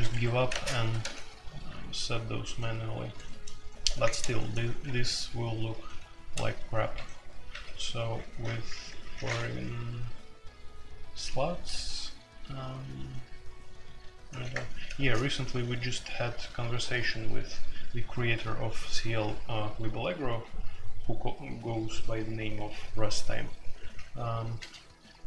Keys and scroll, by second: 0.1 Escape, 0.5-8.4 typing, 4.0 Return, 10.9-11.6 typing, 14.5 Return, 14.9 space, 24.5 BackSpace.